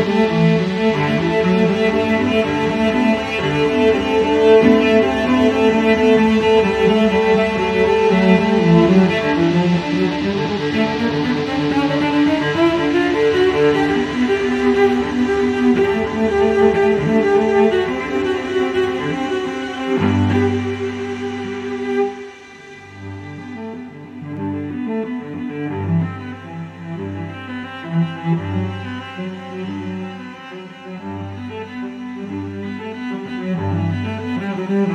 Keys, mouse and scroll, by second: 0.9 click, 1.9 click, 5.8 click, 8.8 click, 9.8 space, 11.4 click, 12.1 click, 12.7 space, 13.2 click, 14.0 space, 14.8 click, 17.1 click, 18.3 click, 19.7 click, 20.9-22.4 scroll up 3, 23.2 click, 24.7 click, 26.9 3, 27.8 click, 29.3 click, 29.7 click, 31.9-33.5 drag, 34.5 click.